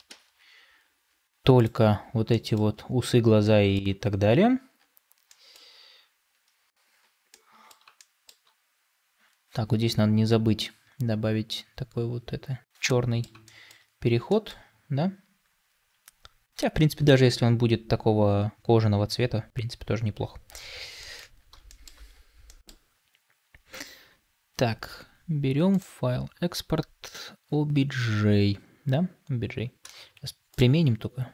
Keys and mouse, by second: 0.0 ctrl+space, 2.1-2.5 middle drag, 3.2-3.6 shift+middle drag, 5.1-6.1 middle drag, 7.3-7.6 middle drag, 7.9-8.3 shift+middle drag, 12.7-13.1 middle drag, 13.3 shift+middle click, 14.1-20.0 middle drag, 20.8-21.4 middle drag, 21.5 shift+middle drag, 22.3 middle click.